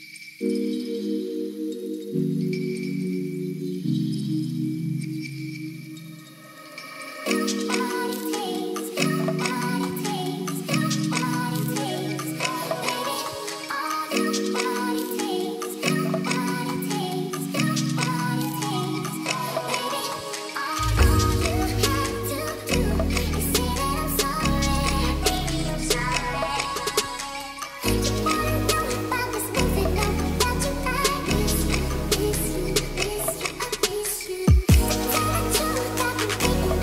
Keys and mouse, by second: 2.0 click, 5.5 ctrl+s, 5.8 click, 7.1 click, 8.2 shift+middle drag, 9.0 s, 9.5 right click, 9.9 s, 11.7 click, 13.4 ctrl+s, 14.5 shift+middle drag, 15.4 click, 16.0 KP_Decimal, 17.8 middle drag, 18.7 shift+middle click, 20.4 shift+middle click, 21.8 click, 22.4-25.3 drag, 24.6 BackSpace, 26.2 ctrl+s, 31.5 click, 33.3 click, 35.5-36.6 drag.